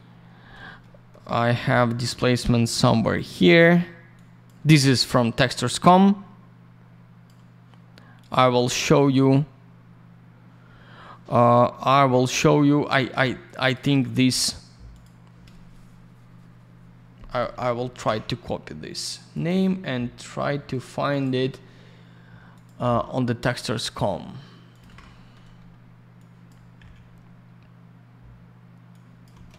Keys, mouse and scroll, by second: 0.8 middle click, 1.7 middle click, 1.8 middle click, 2.1-2.4 scroll up 1, 3.1 click, 4.1 click, 5.6 click, 8.2 click, 8.3 click, 13.4 click, 13.5 click, 13.6 click, 13.7 click, 13.8 click, 13.9 double click, 14.9 click, 15.0 click, 17.9 ctrl+c, 19.3 click, 19.4 click, 21.1 click, 21.3 click, 22.5 click, 22.6 click, 23.9 click, 23.9 click, 24.7 click, 24.8 ctrl+click, 24.8 ctrl+v, 26.1 click, 26.8 Delete, 28.9 click, 29.3 BackSpace.